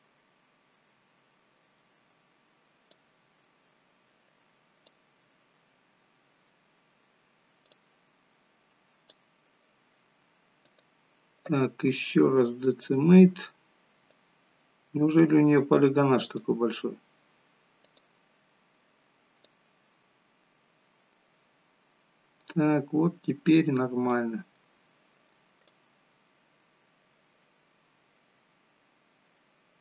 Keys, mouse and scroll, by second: 3.4 middle click, 5.7 click, 8.2 click, 10.6 click, 14.0 click, 17.7 click, 20.0 click, 24.5 middle click, 26.1 click.